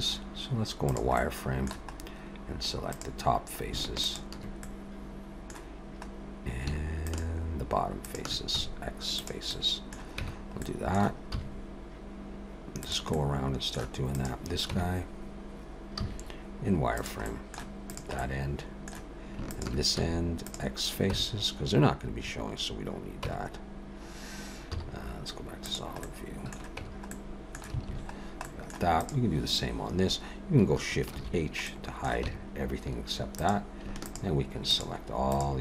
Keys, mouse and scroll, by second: 1.2 middle click, 2.0 scroll up 1, 2.8 click, 4.0 shift+click, 4.6 middle click, 6.0-6.7 scroll up 2, 7.2 shift+click, 8.0 shift+click, 8.5 x, 9.5 middle click, 10.2 Tab, 10.6 middle click, 11.3 z, 13.1 middle click, 14.1 click, 14.7 Tab, 16.0 z, 17.2 middle click, 17.9 click, 18.2 middle click, 19.4 shift+click, 20.0 x, 21.1 Tab, 23.2 Tab, 24.7 z, 26.0 middle click, 26.8 Tab, 27.1 middle click, 27.9 alt+a, 28.1-28.4 scroll down 2, 28.4 middle click, 29.0 click, 31.1 shift+h, 31.7 middle click, 32.2 Tab, 33.4 click, 34.0 shift+click, 34.7 shift+click.